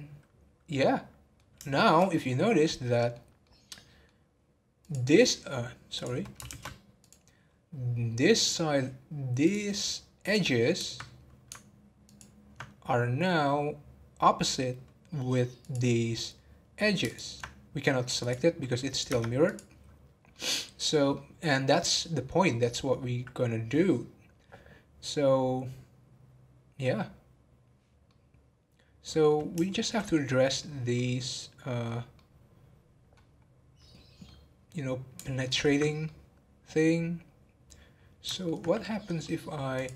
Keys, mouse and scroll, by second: 1.6 shift+middle click, 2.0-2.4 scroll up 1, 2.4-4.8 middle drag, 4.8 click, 5.9 click, 6.4 shift+s, 8.4 click, 9.4 click, 12.0 ctrl+click, 15.6 click, 17.0 ctrl+click, 18.2 click, 19.4 click, 20.3-22.4 middle drag, 22.4 scroll down 1, 22.6-25.8 middle drag, 28.0-39.1 middle drag, 39.7-39.9 drag.